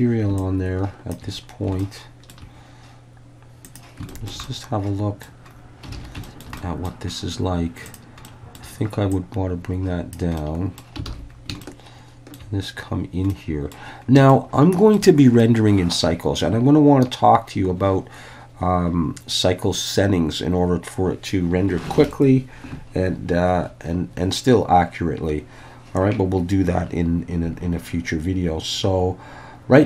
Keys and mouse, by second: 0.4 shift+click, 1.8-2.3 shift+middle drag, 3.7 click, 4.1 shift+middle click, 4.4-5.3 middle drag, 6.0 alt+a, 6.3 shift+middle click, 6.6 middle click, 8.3 middle click, 9.1-10.1 drag, 10.4 middle click, 11.1 alt+a, 11.7-12.4 shift+middle drag, 13.3 middle click, 14.4-15.0 shift+middle drag.